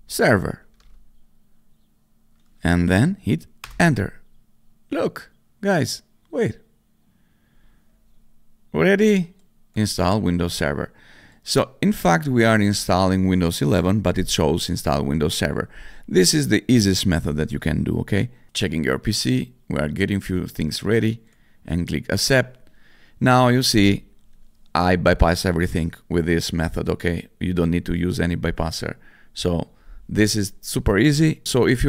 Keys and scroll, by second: 0.0-1.2 typing, 3.6 Return.